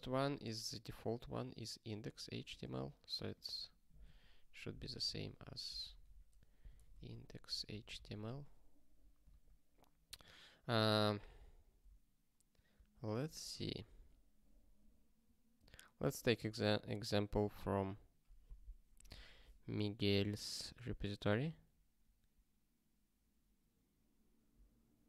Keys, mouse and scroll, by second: 9.2 Return.